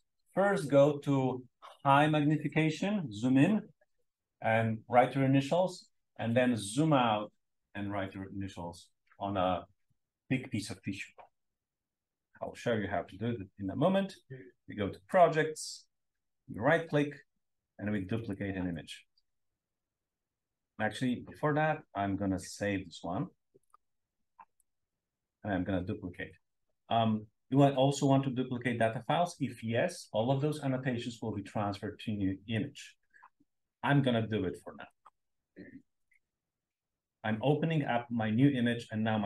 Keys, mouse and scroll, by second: 15.0 click, 18.2 click, 20.6 click, 24.5 right click, 25.2 click, 34.8 click, 36.0-36.9 drag, 38.1-39.0 scroll up 2.